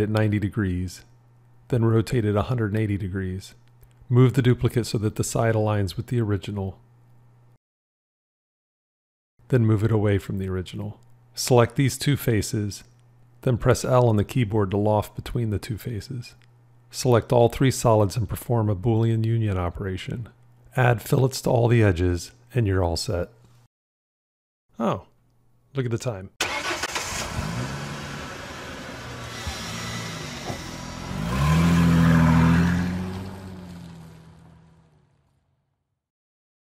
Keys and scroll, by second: 2.2 r, 6.9 g, 7.4 v, 15.5 l, 19.7 q.